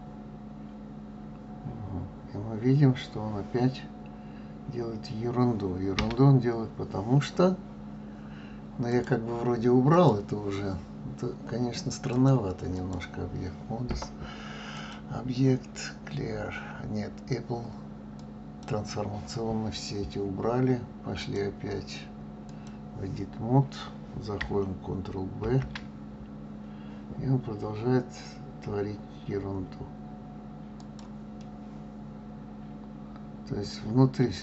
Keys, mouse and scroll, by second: 8.9-11.9 drag, 12.1-17.8 drag, 21.2-24.2 drag, 25.4 ctrl+b, 31.4-34.4 middle drag.